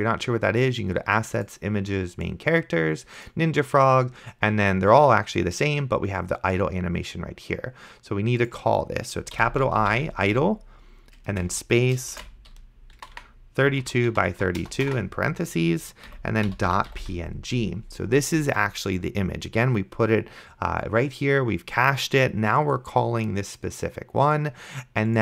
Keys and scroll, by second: 9.3-11.3 typing, 12.4-17.6 typing, 16.1 Right.